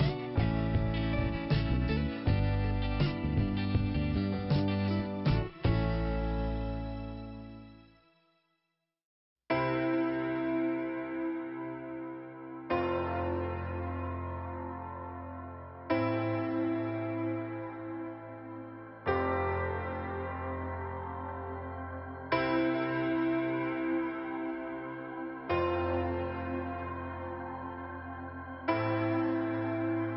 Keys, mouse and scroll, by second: 0.4 middle click, 1.3 Delete, 2.4 click, 2.8 click, 2.9 double click, 7.2 middle click, 8.2 click, 11.4-12.2 scroll up 1, 12.2 scroll up 1, 16.1 scroll down 2, 17.0 middle click, 17.9 scroll down 2, 18.4 middle click.